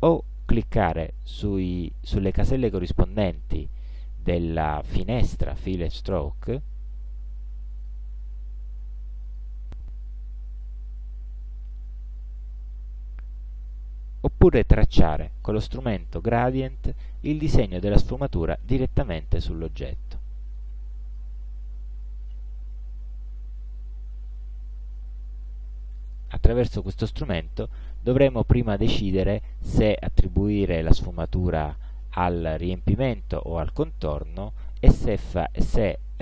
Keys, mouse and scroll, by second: 6.4 click, 7.8 click, 9.3 click, 14.9 click, 17.6-21.4 drag, 25.3 click, 27.6-28.9 drag.